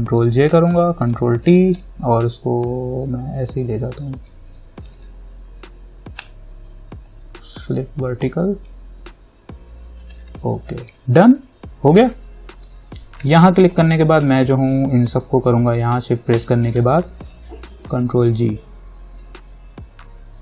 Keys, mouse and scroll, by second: 0.3 ctrl+j, 1.3 ctrl+t, 1.6 right click, 2.8-5.1 drag, 5.1 right click, 6.4-10.3 drag, 13.4 click, 13.9 scroll down 1, 16.5 shift+click, 17.9 ctrl+g.